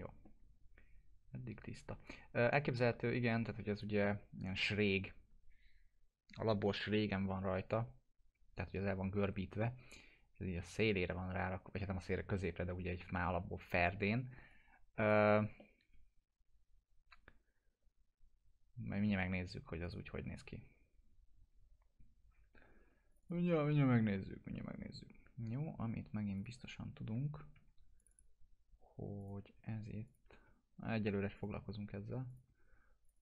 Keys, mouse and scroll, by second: 3.3-3.9 drag, 14.5-15.1 click, 15.6-19.3 alt+middle drag, 19.8 click, 23.1 click, 24.3 1, 26.4 click, 27.6 2, 28.0 click, 30.1 shift+click, 31.4 click, 32.3 shift+click, 33.1 click.